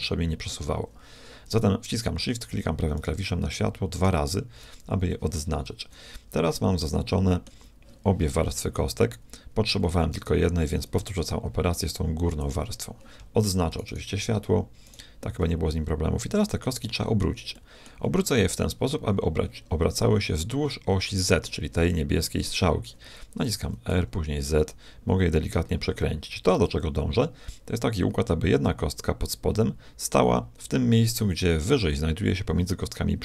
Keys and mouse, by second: 2.9 click, 5.7 KP_1, 7.0 middle click, 10.2 a, 11.0 b, 13.7-16.6 right drag, 16.6-19.3 middle drag, 23.6 r.